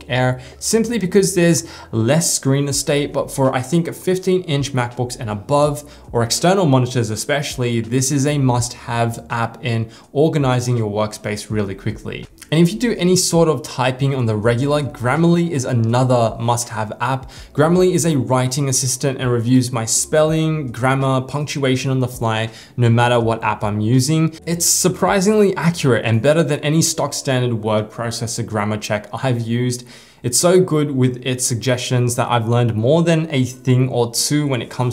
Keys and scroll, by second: 2.1 super+t, 2.2 super+t.